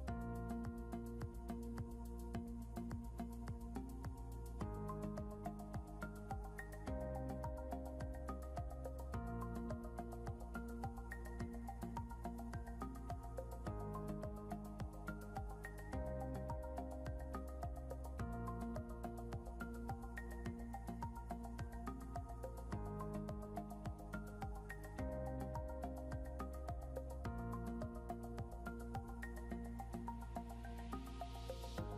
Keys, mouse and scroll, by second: 2.0 shift+click, 3.0 shift+click, 3.8 typing, 16.0 scroll down 1, 20.4 scroll up 1, 22.3-23.3 typing, 24.1 scroll, 24.2 scroll up 1, 25.5 e, 27.1 scroll up 1, 27.1 scroll down 1, 27.2 e.